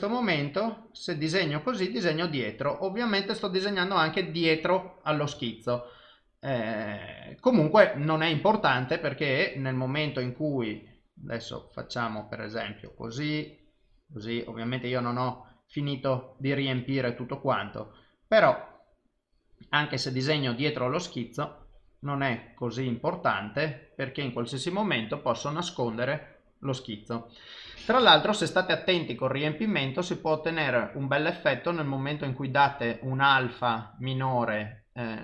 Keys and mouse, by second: 7.1 ctrl+z, 10.7 click, 13.1 click, 14.8 click, 18.3 click, 20.8 click, 25.9 click, 29.8 click.